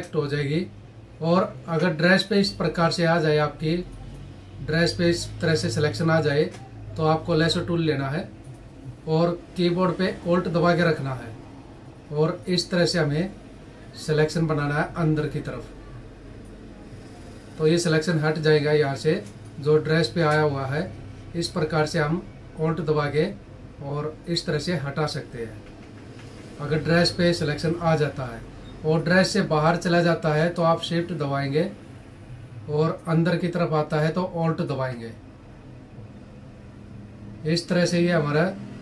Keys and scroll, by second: 0.6 ctrl+=, 1.6 space, 18.7 space, 25.3 ctrl+-.